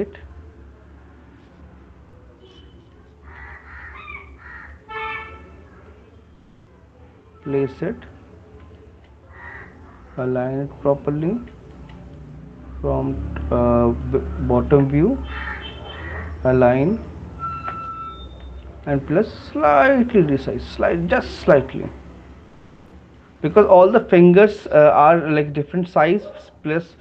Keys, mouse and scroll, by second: 3.6 shift+click, 6.0 click, 7.7 click, 8.9 click, 10.3 click, 11.9 shift+click, 13.5 click, 15.0 right click, 16.7 click, 17.9 right click, 18.8 shift+click, 20.4 click, 24.1 alt+click.